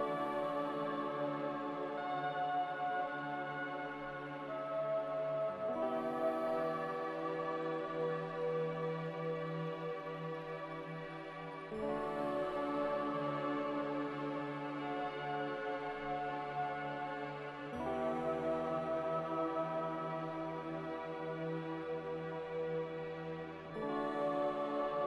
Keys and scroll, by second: 14.6-15.4 typing, 21.1 a, 21.8 z.